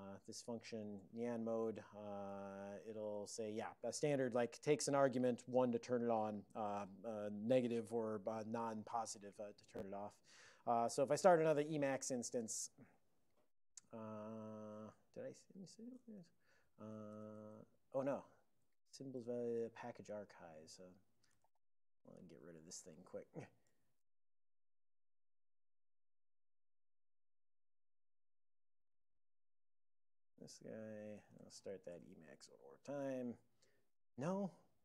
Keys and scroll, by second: 2.5 ctrl+x, 2.8 o, 3.2 ctrl+n, 3.4 ctrl+n, 3.5 ctrl+n, 4.6 alt+f, 4.8 alt+f, 11.6-12.6 typing, 16.9 ctrl+x, 17.2 d, 17.5 Return, 20.2 super+j, 21.0 alt+o, 21.5 ctrl+g, 21.6 ctrl+g, 22.4 super+j, 23.1 super+j, 23.9 ctrl+x, 24.2 o, 24.7 ctrl+p, 29.0 alt+;, 31.7 c.